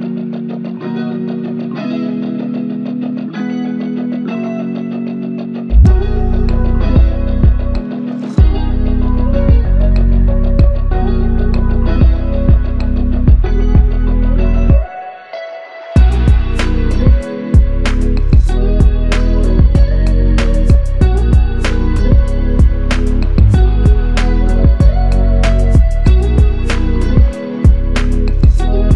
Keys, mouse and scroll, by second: 0.6 alt+click, 1.8 ctrl+alt+click, 5.4 double click, 7.1 ctrl+click, 10.8 ctrl+click, 16.2 double click, 17.4 alt+click, 19.8 double click, 21.9 ctrl+alt+click, 23.0 alt+click, 25.1 g, 26.9 typing, 27.1 ctrl+alt+click.